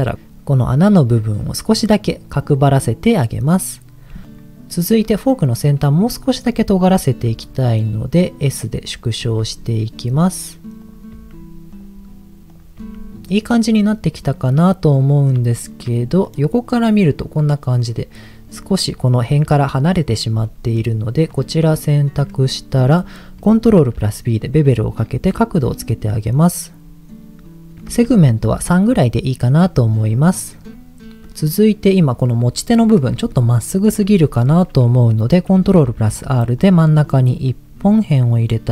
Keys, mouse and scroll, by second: 4.2 click, 6.0 click, 7.3 s, 8.2 click, 8.8 click, 9.2 s, 9.8 click, 10.8 click, 11.1 s, 11.7 click, 12.4 click, 12.8 s, 13.1 middle click, 13.8-15.4 middle drag, 15.6 shift+middle click, 16.0 middle click, 17.0 scroll down 1, 17.9-18.3 scroll down 1, 18.5-18.9 scroll up 4, 20.5 middle click, 21.2 click, 22.2 middle click, 23.7 ctrl+b, 25.2-25.5 scroll down 2, 26.0-26.6 scroll down 2, 26.9-27.4 scroll up 1, 28.2 ctrl+b, 29.4 click, 29.8-30.4 scroll up 2, 30.4 middle click, 31.2 middle click, 33.3 middle click, 34.0 Tab, 35.6 ctrl+r, 37.0 right click, 37.4-38.6 middle drag.